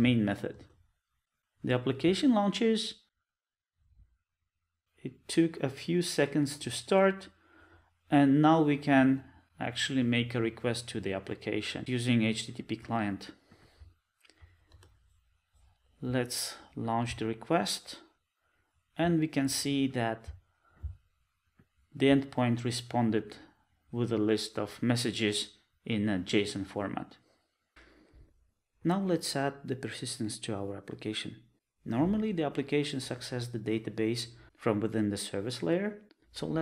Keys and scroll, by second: 14.7 Return.